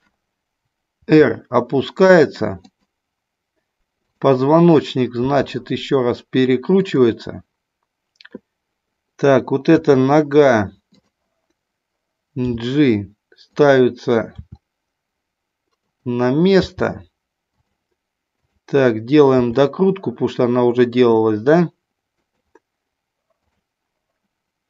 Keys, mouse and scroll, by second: 1.1 r, 2.7 click, 5.2 r, 6.8 click, 9.7 KP_3, 12.4 g, 13.6 click, 14.4 r, 16.6 g, 17.4 click, 18.3 click, 19.3 r, 22.2 click.